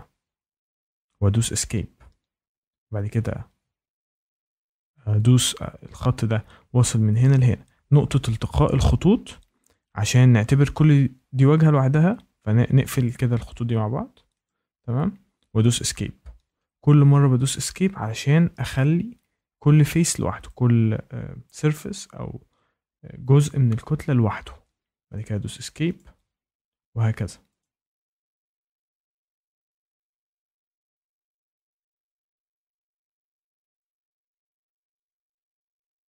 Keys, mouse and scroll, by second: 1.3 Escape, 3.1 click, 7.2 click, 9.6 Escape, 13.0 click, 14.4 click, 15.3 Escape, 18.7 click, 20.4 click, 24.9 Escape, 25.9 click, 27.6 click, 27.9 Escape, 28.8 click, 29.3 click, 29.4 Escape, 30.3 click, 31.1 click, 31.9 ctrl+z, 33.1 click, 33.8 click, 33.9 Escape, 34.2 click, 34.6 click, 34.9 Escape, 35.8 click.